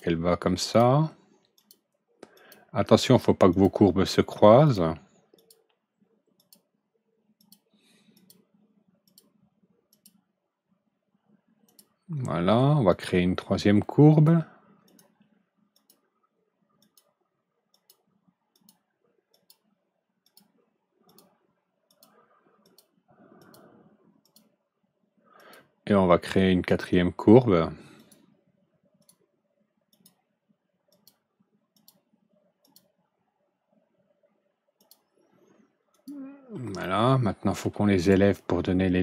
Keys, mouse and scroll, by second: 0.5 click, 1.5 click, 2.3 click, 3.4 click, 4.6 click, 5.3 click, 6.3 click, 7.3 click, 8.1 click, 9.0 click, 9.8 click, 11.6 click, 12.8 click, 14.0 click, 14.8 click, 15.7 click, 16.7 click, 17.6 click, 18.5 click, 19.2 click, 20.1 click, 21.0 click, 21.8 click, 22.5 click, 23.3 click, 24.1 click, 25.3 click, 26.6 click, 27.9 click, 28.9 click, 29.8 click, 30.8 click, 31.7 click, 32.5 click, 34.7 click, 35.8 click, 36.7 ctrl+alt+middle click, 37.9 ctrl+alt+right click.